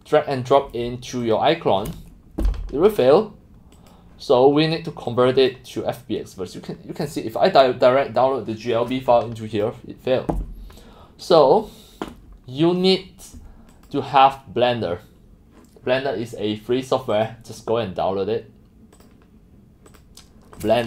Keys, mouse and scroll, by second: 1.4 click, 2.3 click, 5.1 click, 6.5-8.0 drag, 13.7 click, 17.1 click, 20.6-20.8 drag.